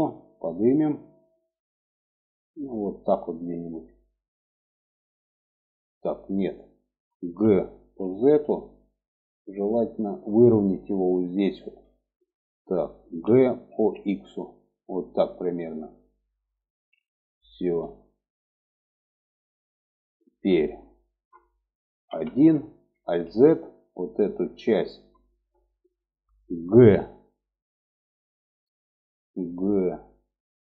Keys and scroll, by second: 6.6 g, 12.5 g, 21.4 1, 22.4 alt+z, 30.1 g.